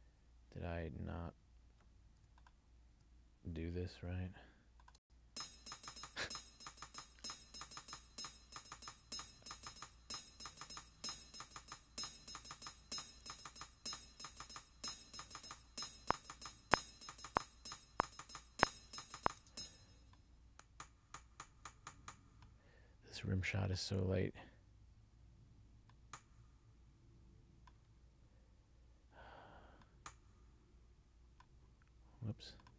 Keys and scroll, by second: 5.1 space, 19.6 space.